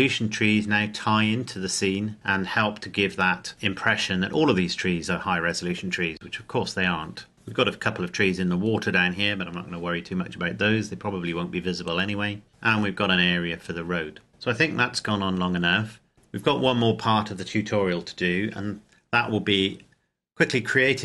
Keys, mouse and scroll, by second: 3.1-3.6 scroll down 1, 16.1 scroll up 1.